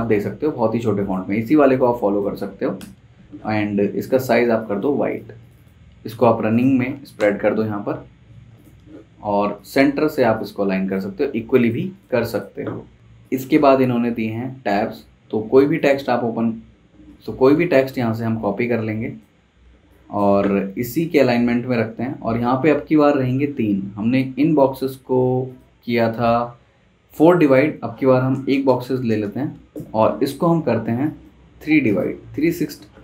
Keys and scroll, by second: 2.8 shift+super+], 7.1 BackSpace, 7.6 Escape, 17.1 super+z, 19.6 space, 28.3 shift+Down, 28.5 shift+Down.